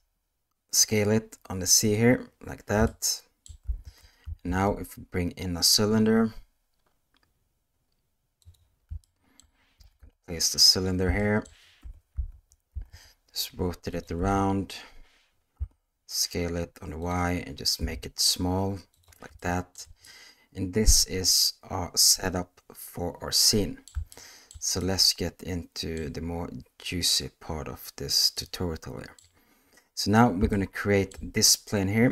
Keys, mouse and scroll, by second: 2.9-3.4 shift+middle drag, 3.8 alt+a, 4.4 shift+a, 9.0-9.4 shift+middle drag, 9.8 g, 11.2 shift+middle click, 11.8 r, 14.2 s, 17.8 s, 19.4-19.7 shift+middle drag, 20.0-23.9 middle drag, 24.1-24.5 shift+middle drag, 24.8-25.9 middle drag, 28.4 middle click, 30.5-31.1 shift+middle drag.